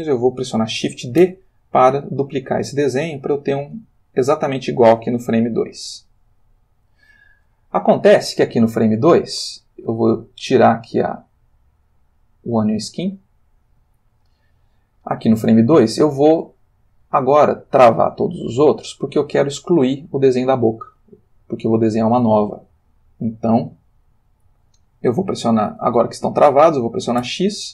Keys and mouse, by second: 1.2 shift+d, 3.8 space, 4.7-6.8 drag, 10.6 click, 11.6 click, 14.1-15.4 ctrl+middle drag, 16.7 click, 17.6 click, 27.2 x.